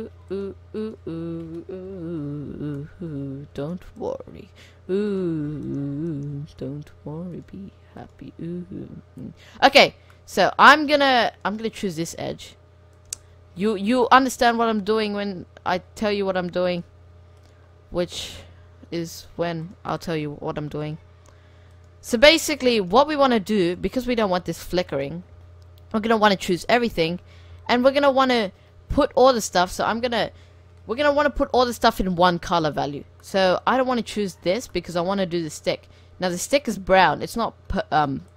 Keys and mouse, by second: 2.3 f, 2.4 click, 2.8 middle click, 3.7-6.7 middle drag, 6.9 right click, 7.9-9.2 drag, 9.3-10.3 middle drag, 10.5 middle click, 11.4-13.2 right drag, 12.2 s, 13.3-14.1 middle drag, 14.5 a, 14.6 a, 15.7 s, 17.0 g, 17.4 click, 18.4 s, 20.9 s, 22.2 g, 25.6-26.7 drag, 26.7-27.7 middle drag, 28.1 click, 31.1 c, 33.0 middle drag, 33.8 c, 34.8 middle click, 35.0-36.5 right drag, 35.1 middle click, 36.5-38.3 middle drag, 36.9 c.